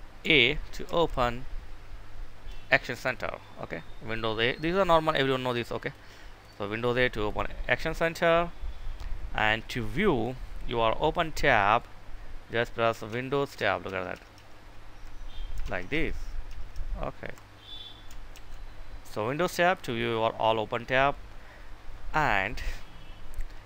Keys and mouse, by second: 0.8 super+a, 5.3 click, 6.1 right click, 6.9 click, 12.9 Tab, 18.2 super+d.